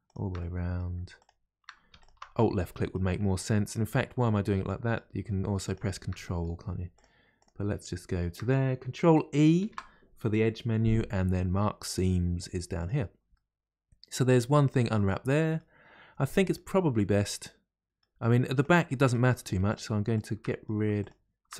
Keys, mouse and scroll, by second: 0.0 shift+click, 0.4 middle click, 1.2 shift+click, 2.0 alt+shift+click, 2.4-5.6 middle drag, 5.6 shift+click, 6.2 middle click, 7.0 shift+click, 7.4 shift+click, 9.6 ctrl+e, 13.3-18.6 middle drag, 18.6 click, 18.9 middle click, 19.7 shift+click, 20.2 shift+click, 20.4 middle click, 21.0 shift+click.